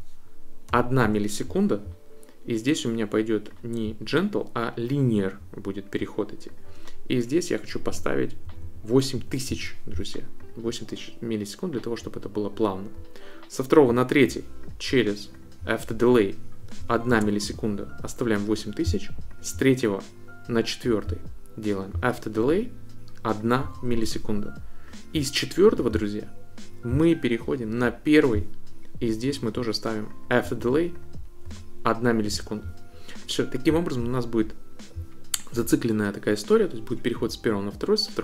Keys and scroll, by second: 0.7 1, 1.0 Return, 7.9 8, 8.4 0, 9.5 Return, 16.8 1, 17.1 Return, 23.6 1, 23.9 Return, 31.4 1, 32.3 Return.